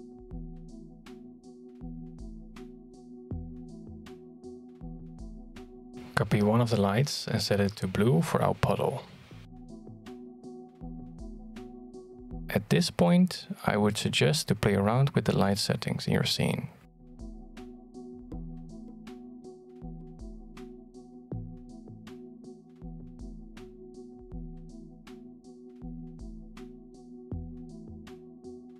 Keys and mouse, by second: 0.0-0.6 middle drag, 0.9 g, 2.7 middle click, 3.7 shift+d, 5.6 middle click, 7.0 middle click, 8.1 right click, 8.7 shift+middle click, 9.3 middle click, 9.6 shift+d, 10.9 g, 13.9 shift+middle click, 18.3-21.0 shift+drag, 21.2 click, 22.5-23.9 shift+drag, 24.2 middle click, 24.6 middle click, 24.9 shift+middle click, 25.2 g, 25.9 shift+d, 26.6 g, 27.1 shift+d, 28.6 middle drag.